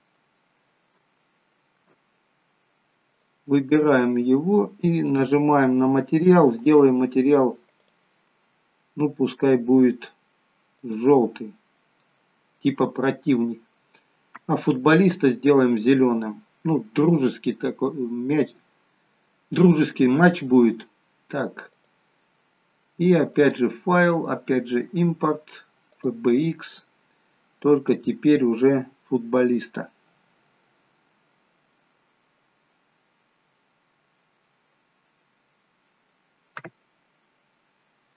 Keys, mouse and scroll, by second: 0.8 scroll up 1, 0.9 shift+middle click, 2.0-2.9 scroll up 1, 2.9 scroll up 2, 3.0 click, 5.1 click, 14.6 scroll down 6, 15.2-15.8 scroll down 4, 15.8 middle click, 21.6 click, 23.3 click.